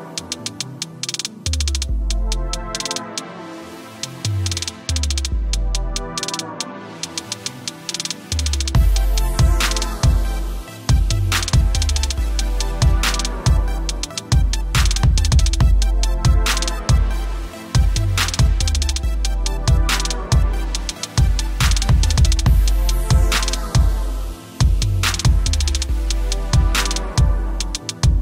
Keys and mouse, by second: 2.1 alt+click, 2.5 click, 3.0 ctrl+=, 3.4 click, 3.8 click, 4.4 Return, 5.1 click, 6.6-7.6 typing, 8.3 click, 10.9 typing, 14.3 space, 14.4 click, 14.5 space, 15.5 click, 16.9 space, 17.1 click, 17.1 space, 19.4 ctrl+s, 20.0-21.3 typing, 21.6 click, 22.4 ctrl+click, 25.5 click, 26.9 t.